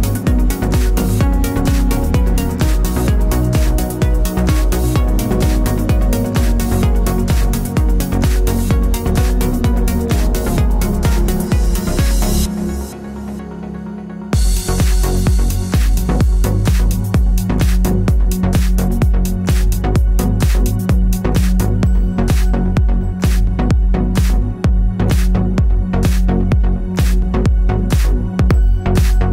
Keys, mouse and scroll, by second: 1.1 KP_Enter, 1.4 KP_1, 2.8 alt+shift+click, 12.7 click, 19.3 alt+Num_Lock, 20.4 click, 21.4 click, 23.3 u, 24.1 click, 27.5 Return, 27.9 KP_0.